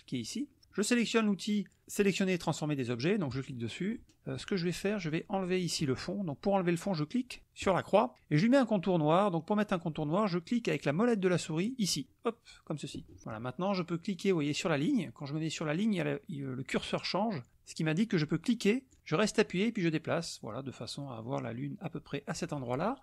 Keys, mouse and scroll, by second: 3.3 click, 7.6 click, 12.0 middle click, 19.2-22.6 drag.